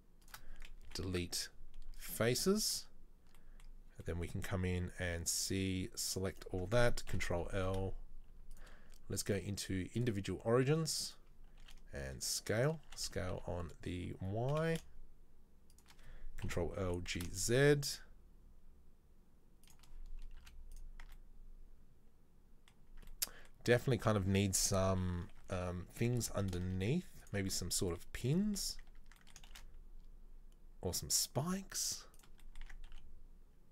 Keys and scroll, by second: 0.8 Delete, 5.2 c, 7.2 ctrl+l, 7.6 e, 11.8 s, 13.0 s, 16.5 ctrl+l, 16.9 g, 20.6 z, 21.2 Tab, 23.0 Tab, 24.2 Tab, 25.2 Tab, 25.5 a, 26.2 g, 29.0 Tab, 29.6 shift+a, 32.6 Tab, 33.0 s.